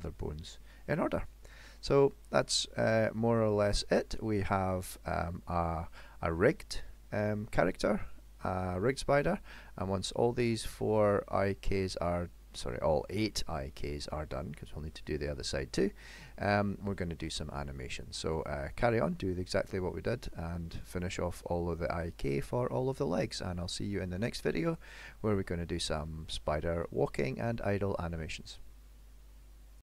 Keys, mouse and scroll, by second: 0.1 middle click, 1.5 middle click, 2.3 click, 2.8 middle click, 3.8 shift+middle click, 4.4 middle click, 6.8 middle click, 9.8 middle click, 12.2 middle click, 12.7 shift+middle click, 14.4 middle click, 15.2 middle click, 16.1 shift+middle click, 16.6 shift+middle click, 18.7 middle click, 19.1 shift+middle click.